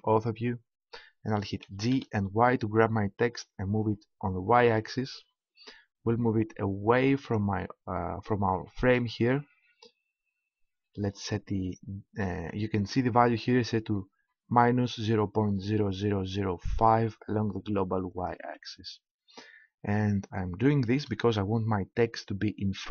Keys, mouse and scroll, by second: 1.5-4.6 middle drag, 1.6 g, 18.2-20.1 drag, 21.0 KP_1.